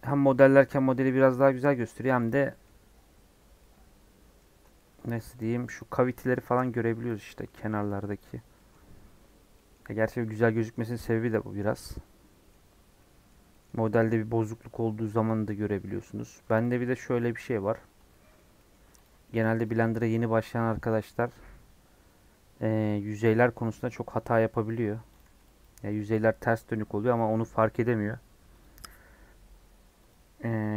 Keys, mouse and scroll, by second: 1.3 scroll down 1, 1.5 middle click, 1.9-2.2 scroll up 1, 2.2 click, 2.5 middle click, 2.7-3.4 scroll up 2, 3.4 scroll down 2, 3.6 middle click, 4.5 Tab, 4.7 middle click, 5.0 2, 5.3 middle click, 5.7 click, 6.4 ctrl+b, 7.4 middle click, 7.8 Tab, 8.0 middle click, 8.2 scroll up 3, 8.5-10.7 middle drag, 10.7 scroll down 2, 10.9 middle click, 11.3 Tab, 11.7-12.8 middle drag, 12.8 Tab, 13.0-16.0 middle drag, 16.0 Tab, 16.3 3, 16.7 click, 17.1 scroll down 1, 17.1-18.5 middle drag, 18.5 scroll down 1, 18.5 middle click, 19.0 click, 19.2 middle click, 19.8 middle click, 20.0 x, 21.2-23.5 middle drag, 23.5 scroll down 1, 25.1 click, 25.6 x, 25.8-27.1 middle drag, 27.1 scroll up 2, 27.3-28.5 middle drag, 28.5-30.7 drag.